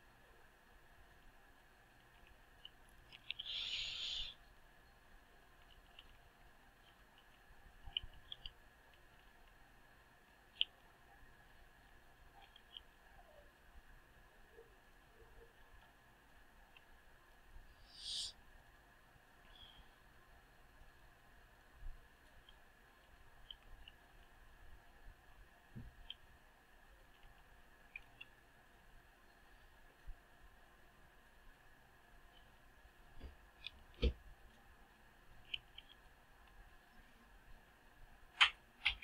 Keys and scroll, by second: 10.5 Tab, 23.5 Delete, 29.0 ctrl+space.